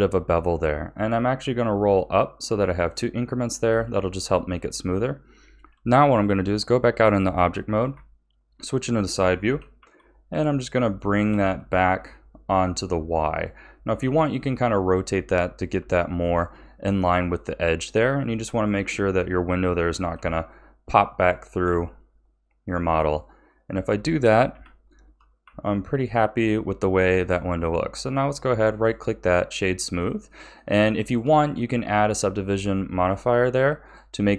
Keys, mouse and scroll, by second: 3.6 a, 4.8 scroll down 3, 5.7 Tab, 7.8 KP_3, 9.4 g, 11.2 g, 14.0 r, 15.7 z, 20.1 g, 21.6 r, 24.5 KP_1, 25.4 z, 27.3-28.0 middle drag, 28.0-29.5 right drag, 29.5-31.4 middle drag, 31.4-33.0 scroll up 3, 33.0-34.3 drag.